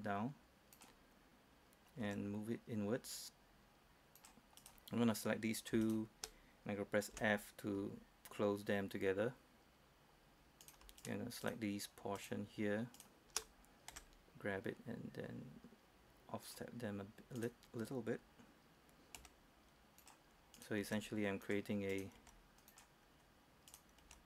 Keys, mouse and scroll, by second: 0.8 click, 2.1 g, 4.3 click, 4.7 right click, 6.0 shift+right click, 7.3 shift+f, 10.8 right click, 11.1 shift+right click, 12.3 shift+right click, 14.0 shift+g, 16.6 click, 17.5 right click, 19.3 g, 20.1 click, 20.7 right click, 21.0 g, 21.6 click, 22.0 right click, 22.3 g, 22.8 click, 23.8 right click, 24.1 g.